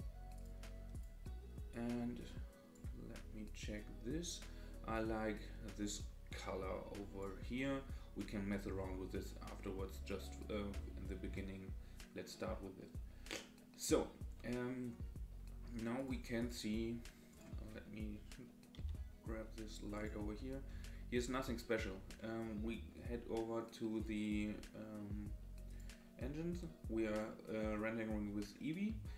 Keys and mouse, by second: 1.7-2.7 drag, 4.2 click, 9.2 middle click, 18.8 g.